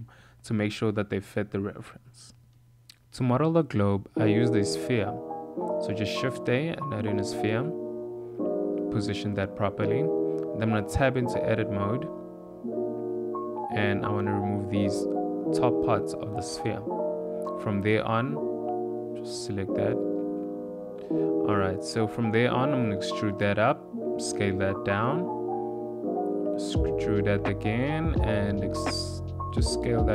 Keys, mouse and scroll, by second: 0.6 click, 0.8 2, 1.3 click, 3.0 shift+s, 3.8 shift+a, 6.8 g, 8.8 s, 10.4 click, 10.6 Tab, 12.1 click, 13.0 1, 14.2 click, 15.2 click, 15.7 click, 16.7 click, 17.2 click, 17.8 click, 18.4 click, 19.4 x, 20.2 click, 21.6 e, 23.1 s, 25.5 e, 27.9 s.